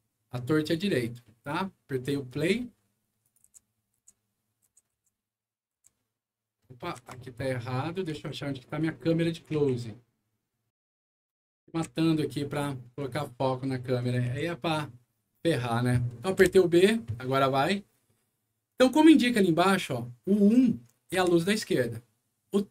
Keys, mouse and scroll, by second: 1.1 middle click, 2.2 click, 3.1 click, 3.3 c, 6.9 Escape, 7.8 middle click, 8.0 alt+w, 8.5-9.3 alt+scroll up 6, 11.2 middle click, 11.6 alt+w, 12.9 alt+click, 13.9 alt+click, 14.2 c, 16.3 b, 21.0 1.